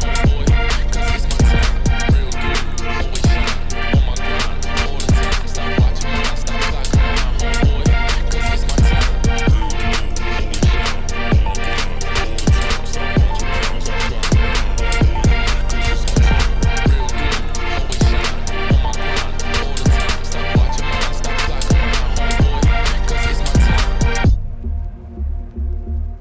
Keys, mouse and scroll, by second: 0.0 Tab, 0.1 middle click, 0.8 Tab, 1.3-2.8 middle drag, 2.8 1, 3.2 KP_7, 3.5 shift+middle click, 3.7-4.0 scroll up 3, 4.0 k, 5.4 scroll down 1, 5.5-6.6 shift+middle drag, 6.6 ctrl+r, 7.5 Tab, 7.6 scroll down 1, 7.9 click, 8.1 click, 8.3 middle click, 8.9 Tab, 9.1 middle click, 9.3 a, 9.4 middle click, 9.6 e, 11.8 Tab, 12.0 click, 12.3 g, 12.7 middle click, 13.1 r, 14.0 middle click, 14.6 s, 17.6 r, 19.1 shift+click, 19.7 ctrl+p, 20.4 scroll down 1, 20.6 z, 20.8 z, 21.0-21.3 scroll down 1, 21.3 scroll up 3, 21.5 click, 21.6 click, 21.9 right click, 22.1 click, 22.4 right click, 22.7 middle click, 23.0 scroll up 5, 23.3 Tab, 23.4 ctrl+r, 25.2 shift+middle click, 25.4 scroll up 3.